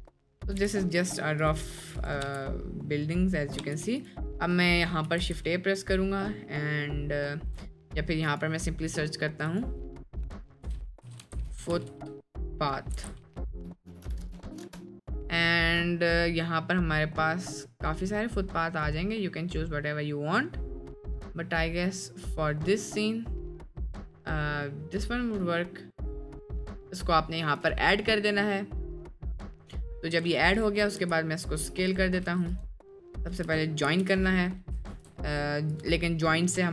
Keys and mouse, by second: 0.5 g, 1.4 drag, 2.0 click, 2.2 space, 4.0 click, 4.0 space, 4.4 middle drag, 5.2 shift+a, 9.5-14.7 drag, 11.2 o, 30.5 click, 31.0 s, 32.0 drag, 32.3 s, 32.9 click, 33.9 ctrl+j, 35.1 ctrl+z.